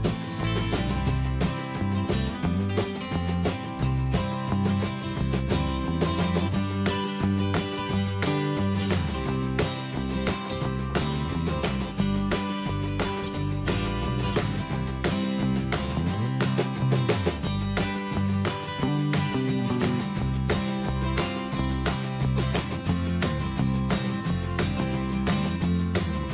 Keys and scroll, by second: 11.6 Return.